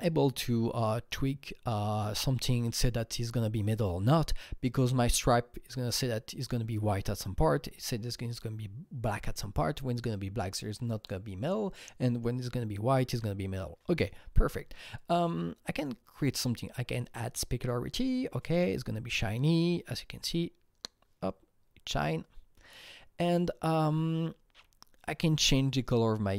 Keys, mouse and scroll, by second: 15.7-16.1 drag, 17.2 drag, 24.2 click, 24.2-26.3 scroll down 7, 25.6 click.